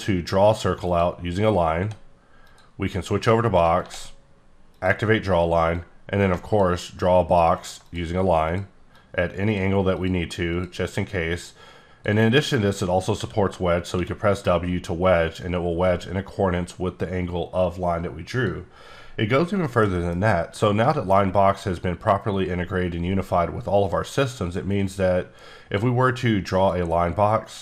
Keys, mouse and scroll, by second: 1.3-1.8 scroll down 1, 1.8 d, 2.4 click, 3.8 ctrl+d, 4.7 click, 6.0 click, 7.9 click, 9.2 click, 11.6-12.3 drag, 13.2 w, 13.9 w, 18.3 click, 19.0-19.4 scroll down 1, 20.1 scroll down 1, 20.2 scroll up 5, 20.9 shift+middle click, 24.2 click, 26.6 click.